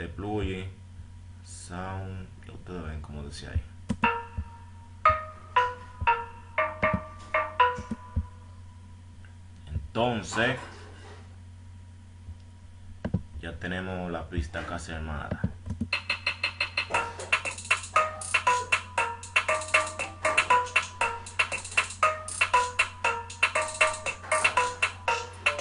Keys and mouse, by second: 5.2 right drag, 5.6 right click, 7.1-8.4 right drag, 8.3 F1, 12.4 F1.